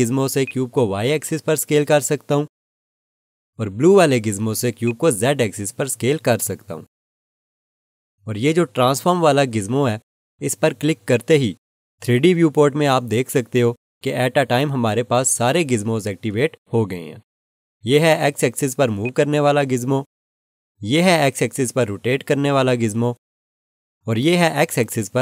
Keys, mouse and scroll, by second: 0.4 click, 8.9 ctrl+z, 11.1 click, 19.0 click.